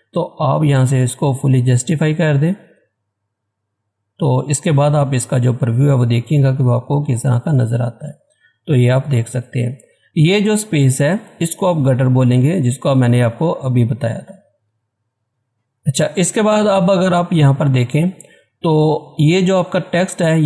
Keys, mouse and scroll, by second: 2.3 click, 7.1 scroll down 1, 7.8 scroll up 1, 10.1 scroll up 1, 13.6 scroll down 1, 16.5-16.9 scroll up 1, 18.7 scroll up 1.